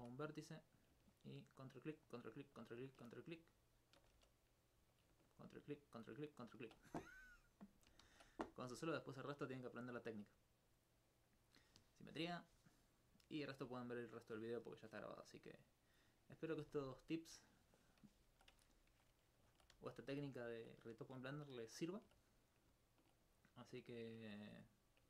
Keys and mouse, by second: 0.0 ctrl+1, 0.2 right click, 1.1 ctrl+click, 1.6 ctrl+click, 2.0 ctrl+click, 2.6 ctrl+click, 3.3 right click, 4.1 shift+e, 4.9 click, 5.3 ctrl+click, 5.8 ctrl+click, 6.4 ctrl+click, 8.0 ctrl+z, 8.7-10.4 middle drag, 18.9 alt+shift+Tab, 19.5 alt+click, 19.9 click.